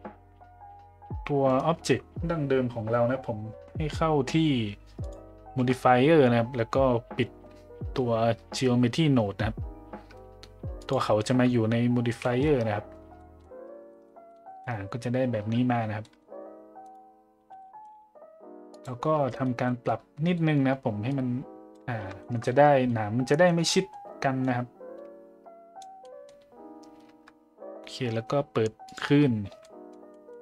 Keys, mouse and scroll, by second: 5.0 click, 10.8 click, 12.2 middle drag, 13.2 middle drag, 13.9 shift+middle drag, 14.3-14.6 middle drag, 16.0 middle drag, 17.6 middle drag, 18.7 click, 19.6 middle click, 20.3 middle click, 21.1 click, 22.2 shift+middle click, 22.4 middle click, 23.7 middle click, 24.4-25.8 drag, 26.0 middle drag, 28.8 click, 29.6 middle drag, 29.6 a, 30.1 middle drag.